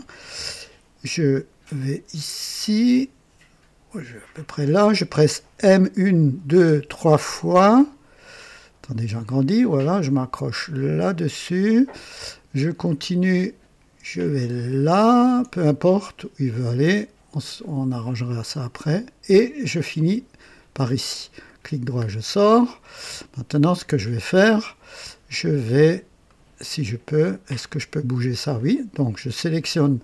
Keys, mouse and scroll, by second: 4.2 click, 5.5-6.7 typing, 8.2 scroll up 2, 10.9 click, 14.8 click, 15.8 right click, 19.8 click, 21.3 right click, 21.9-22.2 scroll down 1, 22.4 right click, 23.7 scroll up 2, 26.2 right click, 27.4-28.4 drag, 28.5 click.